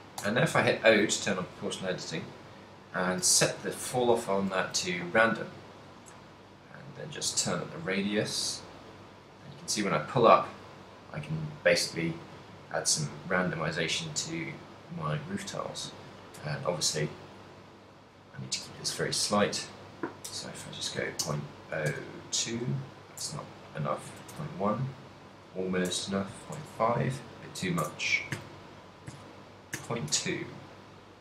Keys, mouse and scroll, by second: 0.3 o, 1.7 click, 4.7 g, 16.6 right click, 17.1 right click, 17.6 ctrl+middle click, 18.3 right click, 18.8 middle click, 19.6 g, 30.6 middle click.